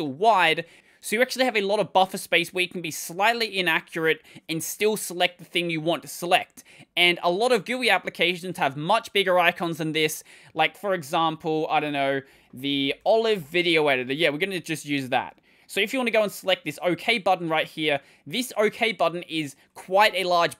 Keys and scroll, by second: 11.6 super+3, 12.1 super+d, 12.3-13.3 typing.